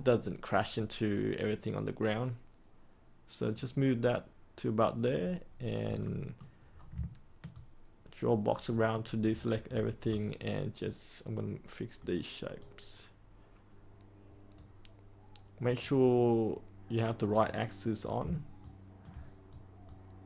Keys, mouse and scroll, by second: 6.0 middle click, 6.7 scroll down 1, 7.5-8.7 ctrl+right drag, 9.2-10.8 scroll up 1, 10.8 right click, 12.5-14.6 drag, 17.4 right click, 18.5 ctrl+right click, 19.5 right click.